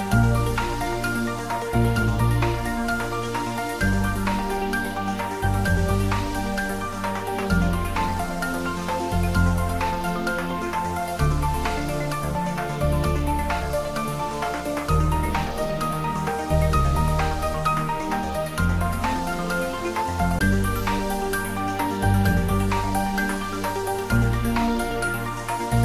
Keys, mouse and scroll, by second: 2.0 scroll up 1, 3.1 click, 4.8 shift+z, 5.2 click, 7.6 click.